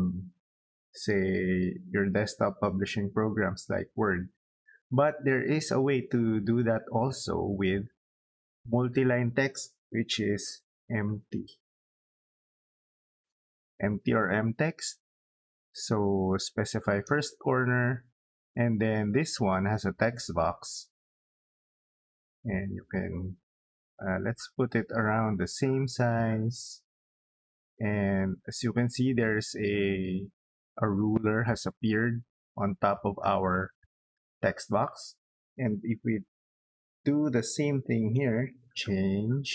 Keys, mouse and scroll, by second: 6.7 middle click, 7.9 middle click, 10.2 m, 10.5 t, 10.9 space, 16.6 click, 20.6 middle click, 22.1 middle click, 24.5 click, 25.8-28.6 middle drag, 30.7 middle click, 32.0 middle click, 32.8 scroll down 2, 33.4 middle click, 37.6-38.6 typing, 38.9 Return.